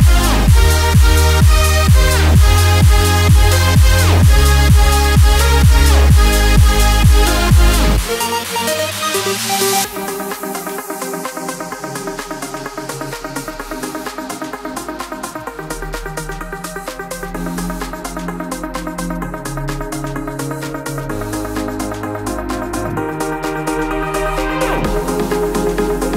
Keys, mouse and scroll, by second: 8.3 click, 9.2 alt+scroll down 1, 10.6-14.6 drag, 14.6 click, 16.8-19.3 typing, 17.0 click, 18.9 click, 20.6 click, 22.2 t, 24.3-26.1 drag.